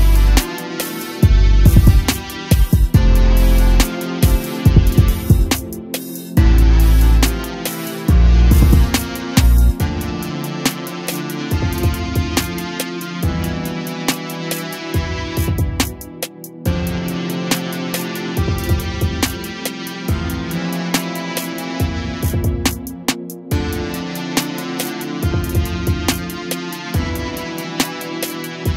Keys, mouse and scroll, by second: 0.7-1.2 drag, 3.2-4.3 drag, 4.5 g, 6.0 g, 10.5 click, 11.5-14.5 drag, 15.6 click, 18.0 g, 19.6-22.0 drag, 22.0 KP_0, 24.1 g, 26.7 click.